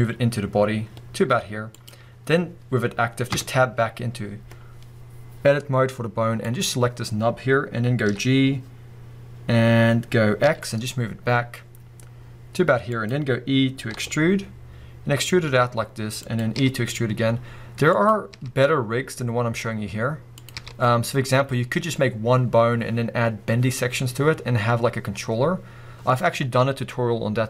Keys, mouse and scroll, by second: 1.9 click, 2.2-3.3 scroll up 1, 3.3 Tab, 4.1-6.4 scroll up 2, 6.4 click, 8.1 g, 13.0 click, 13.9 e, 16.4 click, 16.6 e, 18.1 click, 18.3 e, 20.4 click, 20.6 e, 21.8 click, 24.7-25.9 scroll down 2, 25.9-27.4 scroll up 2.